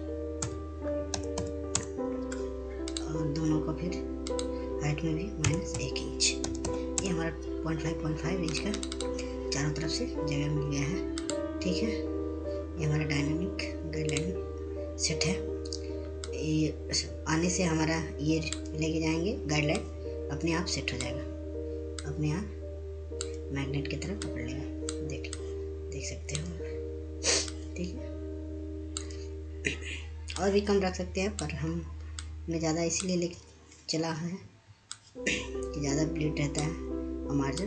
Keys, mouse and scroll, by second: 1.5-2.4 typing, 3.5 shift+click, 6.9-7.9 typing, 9.2 click, 12.0 click, 15.0 click, 17.2-25.8 drag, 26.0-35.7 drag, 35.7-37.6 drag.